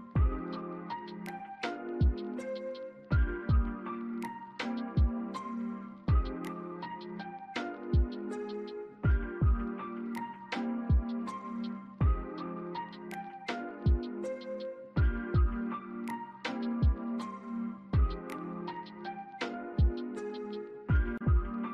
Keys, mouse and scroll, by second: 2.9 scroll down 1, 3.2 alt+middle click, 3.6 scroll down 1, 6.8 scroll up 1, 7.1 alt+click, 10.3 alt+middle click, 10.7 alt+click, 15.7 alt+middle click, 16.9 double click, 17.5 alt+click, 17.9 alt+right click, 19.8 scroll up 1, 20.9 double click, 21.6 ctrl+z.